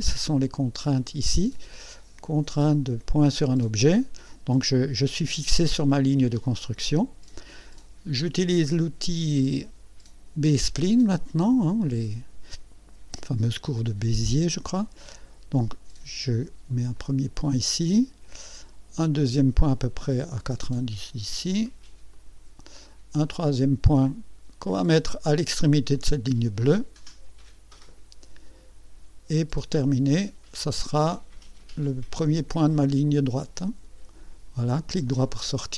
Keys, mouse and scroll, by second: 10.4 click, 16.9 click, 22.1 click, 27.7 click, 33.6 click, 35.0 right click.